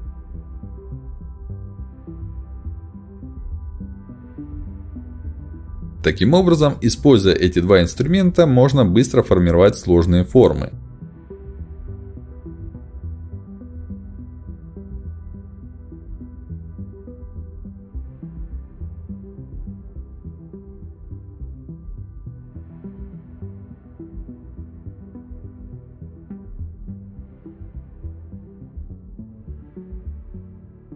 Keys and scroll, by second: 8.6 space, 11.1 e, 15.7 s, 17.9 ctrl+alt+x, 20.8 space, 26.1 ctrl+shift+x, 30.1 space.